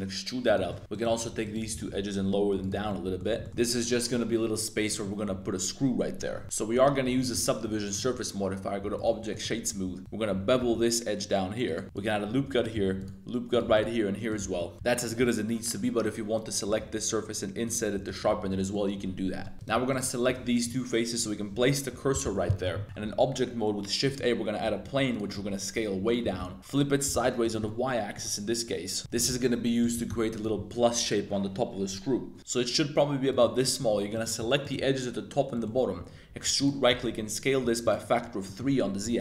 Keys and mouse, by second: 0.4 click, 0.7 shift+click, 0.8 2, 0.9 click, 1.4 shift+click, 1.7 g, 1.8 z, 2.6 click, 2.8 Tab, 2.9 drag, 3.4 shift+click, 3.5 1, 3.5 Tab, 3.9 click, 4.8 click, 6.1 Tab, 6.4 super+0, 6.7 super+1, 6.9 super+2, 7.2 shift+drag, 8.0-9.0 drag, 9.3 click, 9.5 Tab, 9.7 2, 10.6 super+b, 11.6 click, 11.8 super+r, 12.5 click, 12.8 super+r, 13.6 super+r, 14.3 click, 14.4 Tab, 14.5 click, 14.7 shift+super+3, 14.9 shift+super+click, 16.6 i, 18.0 Tab, 18.5 click, 19.2 Tab, 19.4 click, 19.5 3, 19.9 shift+click, 20.2 shift+s, 21.5 Tab, 21.9 Tab, 22.1 KP_Decimal, 22.3 Tab, 23.1 shift+a, 24.6 Tab, 24.8-27.1 typing, 27.4 click, 27.6 middle click, 29.0 Tab, 29.1-30.6 typing, 29.8 click, 30.3 click, 32.4 s, 33.3 click, 33.4 middle click, 34.1 click, 34.1 2, 34.6 shift+click, 35.5 middle click, 35.9 e, 36.6 click, 36.9 s, 37.0 z, 37.6 3, 37.8 click, 38.4 middle click, 39.0 2.